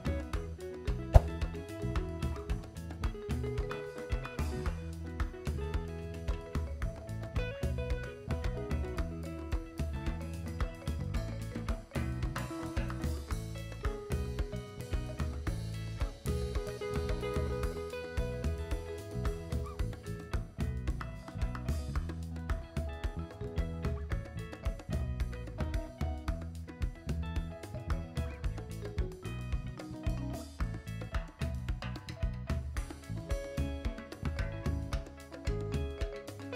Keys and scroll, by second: 29.7 x, 31.1 v.